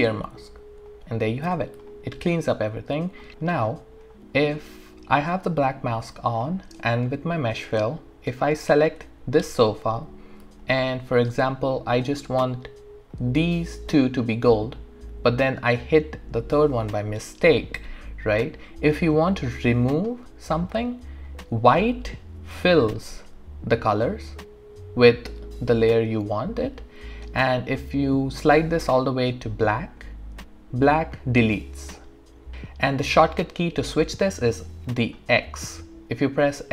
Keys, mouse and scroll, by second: 0.9 click, 1.9-3.3 alt+drag, 2.8 alt+click, 8.5 click, 10.6-12.4 alt+drag, 18.0-19.3 alt+drag, 19.9 alt+middle click, 20.2 alt+right click, 21.0 alt+click, 27.8-35.3 drag, 35.7 x.